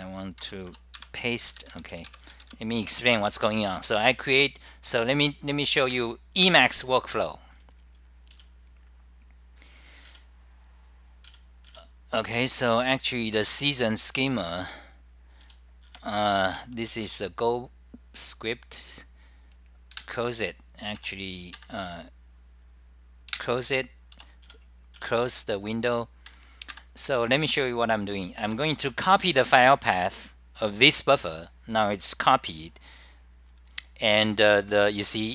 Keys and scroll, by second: 0.5 Return, 0.9-1.6 typing, 2.6 Home, 3.8-4.5 typing, 6.4-7.1 typing, 8.2-8.9 typing, 12.8-13.5 typing, 15.2 d, 15.9 ], 16.5 Left, 16.7-25.1 Left, 20.0 super+w, 23.4 super+w, 23.4 d, 25.1 Return, 26.8 ctrl+g, 28.4-29.1 typing, 31.6-32.3 typing, 34.6-35.3 typing.